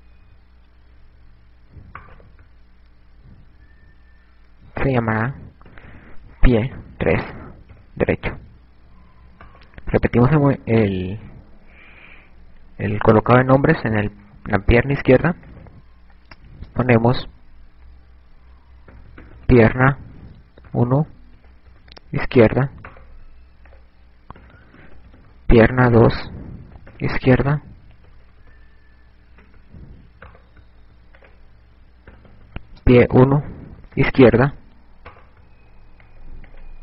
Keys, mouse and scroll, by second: 3.0 right click, 5.8 click, 8.9 right click, 15.7 click, 23.6 right click, 24.6 click, 28.7 KP_Add, 29.2 KP_Add, 29.4 KP_Add, 29.7-30.3 shift+scroll down 3, 31.2 shift+scroll down 2, 31.3 right click, 32.2 click, 36.0 right click.